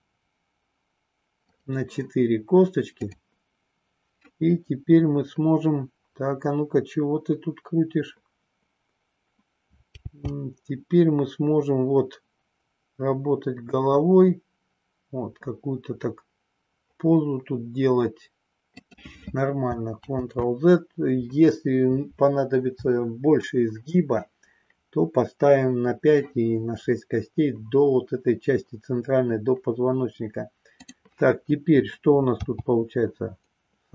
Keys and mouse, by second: 1.5 click, 10.0 g, 18.8 click, 20.0 ctrl+z, 30.8 click, 32.4 g.